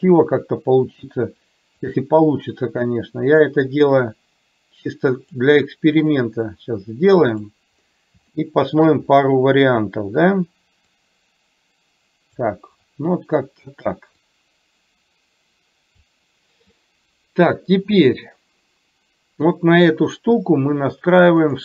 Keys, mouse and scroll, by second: 0.2 KP_3, 1.9-5.4 drag, 6.4-7.5 drag, 8.4 shift+middle click, 11.0 click, 11.4-12.5 drag, 14.3 click, 14.9-16.2 drag.